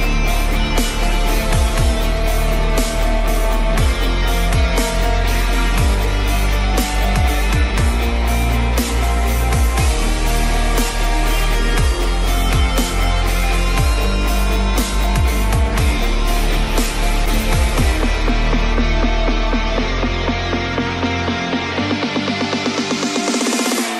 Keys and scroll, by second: 16.7 ctrl+t, 19.7 ctrl+z.